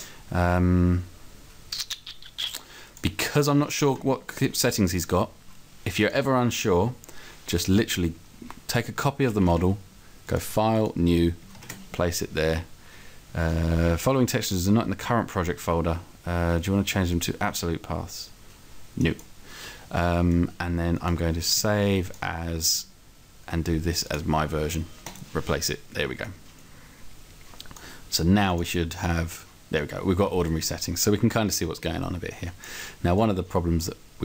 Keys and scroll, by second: 9.3 ctrl+c, 11.7 ctrl+v.